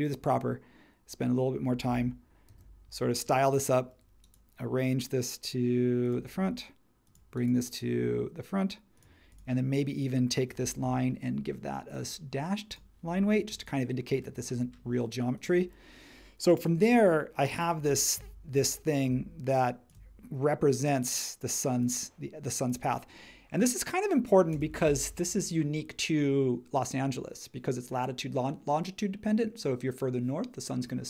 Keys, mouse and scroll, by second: 2.5 super+g.